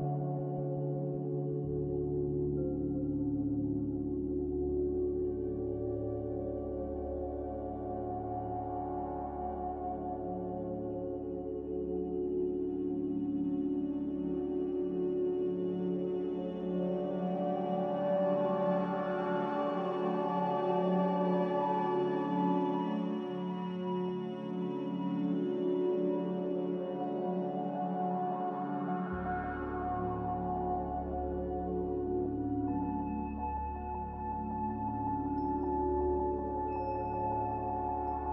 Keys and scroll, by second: 2.4 z, 8.2 c, 11.3 z, 13.0 ctrl+z, 15.5 c, 17.3 space, 29.5 Escape, 30.1 z, 37.0 c.